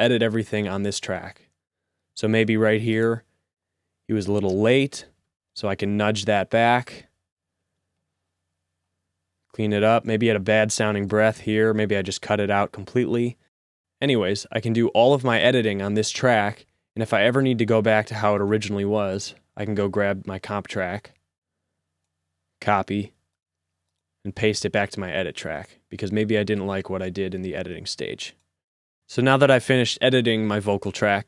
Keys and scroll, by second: 1.9 typing, 3.2-8.4 typing, 11.9 a, 16.4-17.2 typing, 22.8 c, 24.8 v.